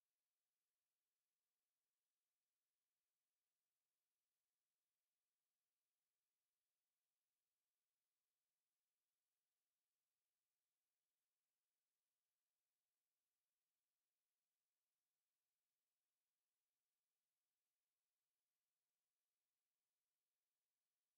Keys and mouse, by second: 0.3-1.7 middle drag, 3.1 z, 5.6 z, 6.0-6.6 middle drag, 6.1 z, 9.3-10.0 middle drag, 11.2 click, 11.2 right click, 15.5-15.9 middle drag, 20.9-21.1 drag.